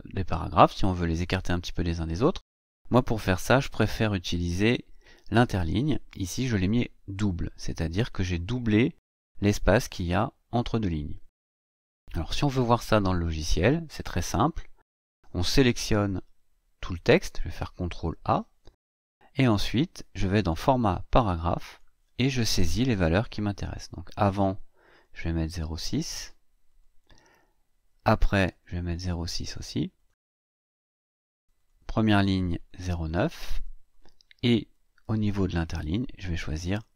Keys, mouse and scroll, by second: 4.2 Right, 12.9 click, 17.6 ctrl+a, 20.2 click, 21.5 click, 24.3 click, 24.7 click, 25.1 click, 25.5 click, 25.9 click, 26.5 click, 28.0 click, 29.2 click, 29.8 click, 31.2 click, 33.3 click, 35.1 click, 36.5 click.